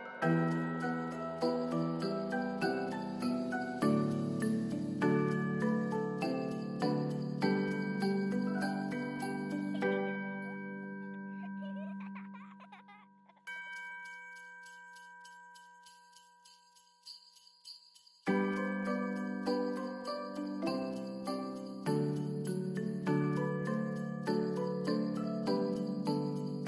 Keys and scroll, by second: 2.6 ctrl+s, 7.8 alt+], 8.1 ctrl+s, 18.7 ctrl+d.